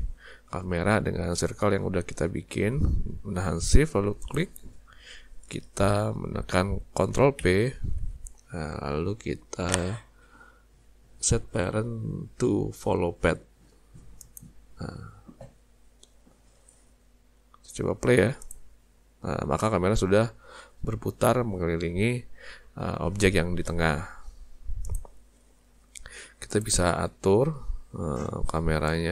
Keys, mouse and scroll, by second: 4.2 shift+click, 7.4 ctrl+p, 18.4 click, 24.9 click, 26.5 click.